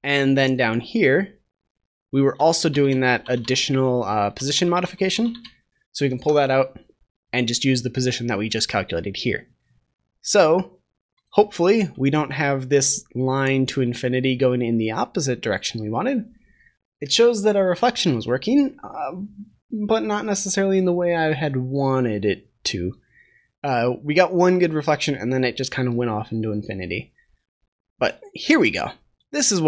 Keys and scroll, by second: 6.0 ctrl+s.